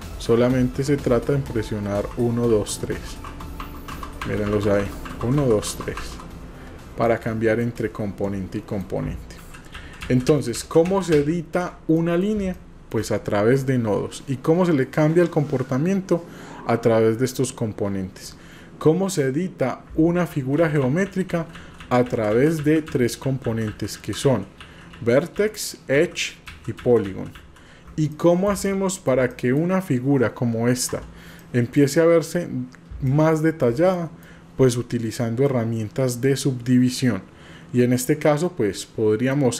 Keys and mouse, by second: 1.4 1, 2.5-5.8 typing, 7.1 click, 7.9 click, 9.7 ctrl+z, 11.1 ctrl+z, 11.6 ctrl+z, 12.1 click, 12.5 shift+click, 18.4 click, 20.6 ctrl+z, 21.1 ctrl+z, 21.8 ctrl+z, 22.1 ctrl+z, 22.5 ctrl+z, 22.9 ctrl+z, 23.7 ctrl+z, 23.9 ctrl+z, 24.6 ctrl+z, 25.0 ctrl+z, 26.5 ctrl+z, 27.4 ctrl+z, 28.3 shift+middle click, 29.4 click, 30.9 Tab, 31.4-31.8 drag, 33.0-33.6 shift+drag, 33.9-34.3 drag, 35.5-39.4 drag.